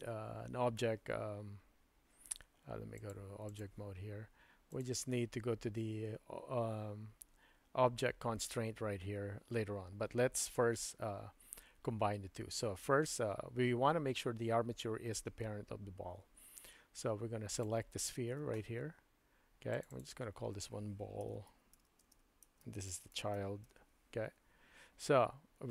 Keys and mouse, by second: 3.1 click, 17.6 click, 19.7 click, 20.0-25.0 drag, 21.9 l.